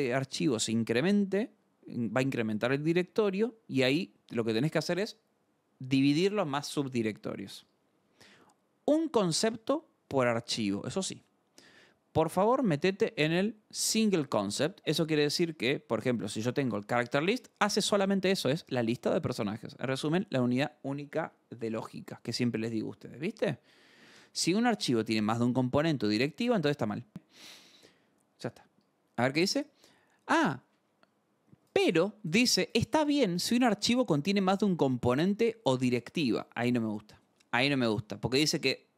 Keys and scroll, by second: 7.6 scroll, 15.6 alt+Tab, 16.4 j, 16.8 Return, 18.2-18.5 scroll down 2, 18.5 k, 18.8 Return, 19.8 alt+Tab, 22.8 Escape, 28.8 scroll.